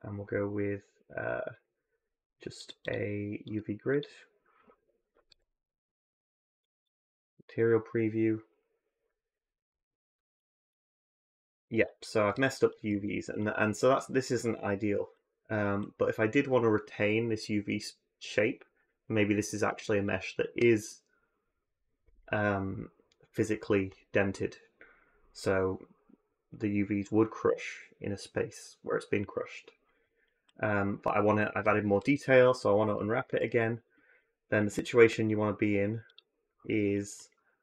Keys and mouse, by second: 5.1 z, 10.5-10.8 middle drag, 12.7 Tab, 31.8 u, 33.2 a, 36.8 click, 37.5 a.